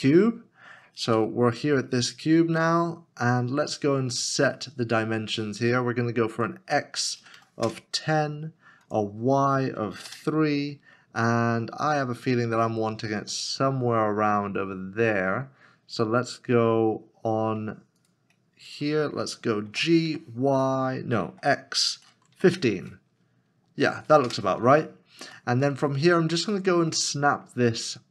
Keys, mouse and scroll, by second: 1.1 KP_Decimal, 1.7 scroll down 1, 7.3 KP_1, 7.7 Return, 7.7 KP_0, 9.7 KP_3, 10.1 Return, 11.2 middle click, 12.1 scroll down 1, 20.1 g, 21.7 x, 22.4 1, 22.5 5, 24.2 Return, 25.6 middle click, 25.9 scroll up 1, 26.6 middle click.